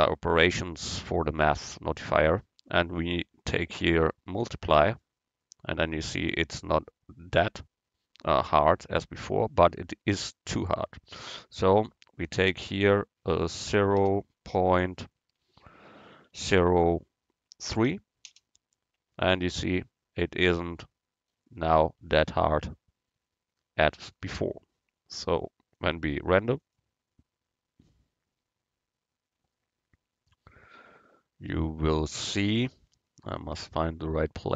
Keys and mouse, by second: 11.7-13.5 drag, 25.8-27.8 drag, 33.3 click.